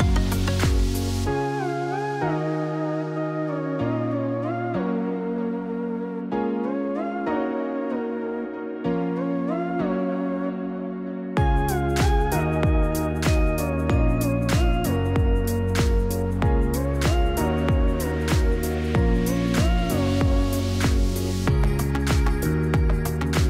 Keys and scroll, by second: 13.0-14.0 typing, 15.4 typing, 18.1-20.1 typing.